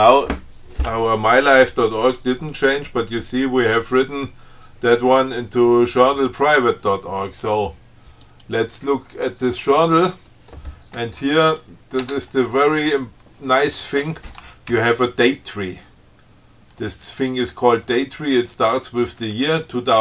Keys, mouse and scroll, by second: 8.5 click, 9.7 click, 11.7 click, 12.3 Tab.